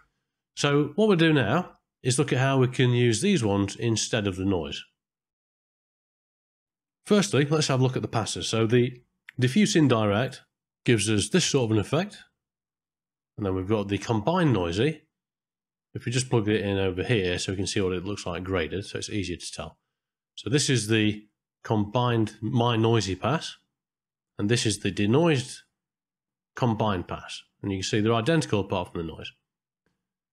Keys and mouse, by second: 1.2 middle click, 3.9 middle click, 4.9 middle click, 5.9 ctrl+space, 6.1 middle click, 6.3 ctrl+middle click, 6.5 click, 7.9 middle click, 10.2 ctrl+shift+click, 11.3 middle click, 14.5 ctrl+shift+click, 16.8-17.9 drag, 18.5 ctrl+shift+click, 24.1 click, 24.2-26.8 drag.